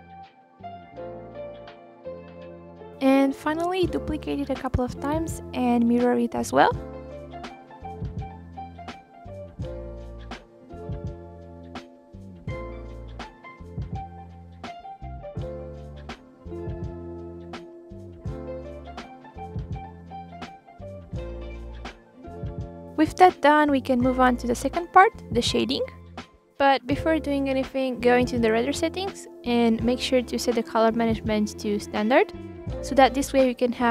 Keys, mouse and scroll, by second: 0.1-0.7 scroll up 1, 0.7-2.1 drag, 2.1 r, 2.9 shift+d, 3.1 middle click, 3.5 r, 4.7 g, 4.9-5.6 middle drag, 5.6 KP_1, 6.5 click, 7.6-8.3 middle drag, 8.3 shift+d, 8.6 r, 9.2 click, 9.7-10.1 middle drag, 10.1 scroll down 4, 10.2-10.8 middle drag, 10.8 click, 10.9 scroll up 1, 11.0 middle click, 11.4 r, 11.9 click, 12.6 middle click, 12.8 r, 13.4 click, 13.9 KP_1, 14.3 click, 14.7 scroll down 1, 14.9-15.2 scroll up 1, 15.2 drag, 16.0 click, 16.5 click, 17.1 click, 17.5 click, 17.8-19.6 drag, 20.6 shift+drag, 21.0 shift+click, 21.5 shift+click, 22.0 ctrl+l, 25.0 drag, 25.3-26.4 middle drag, 26.4 click, 26.7 scroll down 1, 27.0-27.5 scroll up 1, 27.5-27.9 scroll up 4, 27.9 scroll down 1, 28.2-28.6 scroll up 1, 28.6 KP_1, 29.7 click, 31.5 ctrl+z.